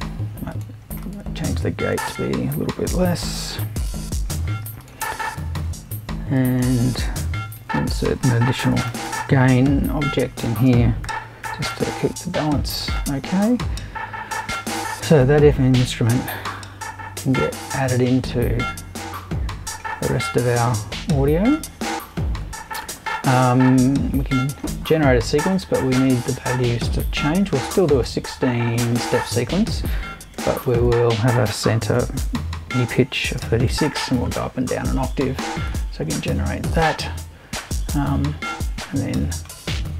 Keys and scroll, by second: 1.9 BackSpace, 7.6 super+i, 8.5-12.2 typing, 30.4 BackSpace, 32.0 3, 32.2 6, 33.4-34.4 typing.